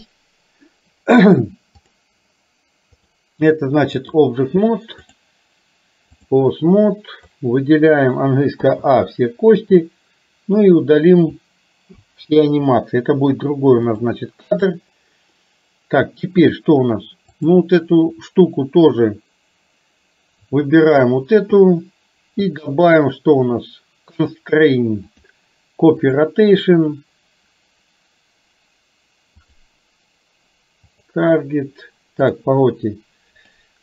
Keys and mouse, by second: 1.9 click, 3.0-4.3 drag, 5.3-6.4 drag, 7.4 click, 8.7 a, 9.9-11.4 drag, 12.0 Delete, 14.0 click, 17.4 click, 20.9 shift+click, 25.4 click, 29.5 click.